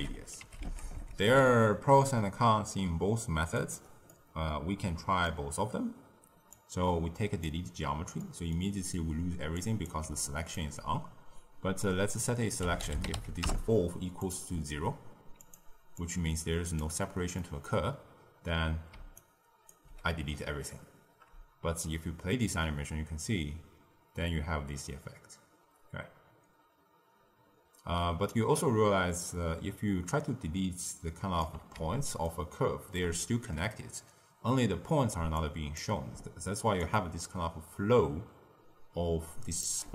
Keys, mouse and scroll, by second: 4.0-6.4 middle drag, 6.4 click, 8.1 middle click, 8.7-9.5 scroll down 1, 9.5 click, 10.0 d, 10.2 click, 10.5 d, 10.6 d, 11.7 click, 14.5-15.3 scroll up 1, 15.3 click, 15.9 click, 17.3 middle click, 17.8-18.9 scroll down 2, 18.9 d, 19.1 right click, 19.7 d, 21.7-24.8 shift+drag, 32.2-34.4 ctrl+middle drag, 34.4-35.3 scroll up 2, 35.3 click, 36.7-39.8 shift+drag.